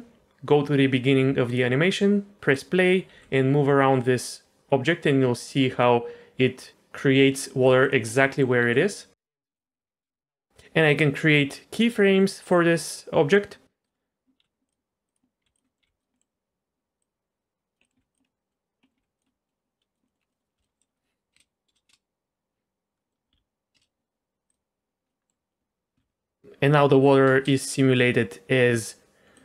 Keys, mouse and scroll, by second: 1.5 click, 2.5 click, 3.1 g, 8.1 middle click, 8.6 g, 9.7 middle click, 10.0 space, 12.1-13.3 middle drag, 13.8 click, 14.4 g, 15.1 click, 15.4 g, 15.6 middle click, 15.8 g, 16.1 middle click, 17.0 click, 17.8 middle click, 18.0 g, 18.2-19.0 middle drag, 19.0 g, 19.3 middle click, 19.9 click, 20.1 middle click, 20.2 scroll down 1, 20.3 middle click, 20.6 middle click, 20.9 middle click, 21.3 space, 21.7 space, 21.9 space, 23.0 middle click, 23.3 z, 23.7 space, 24.5 click, 25.1 click, 25.1 middle click, 25.9 z, 27.3 space, 29.3 drag.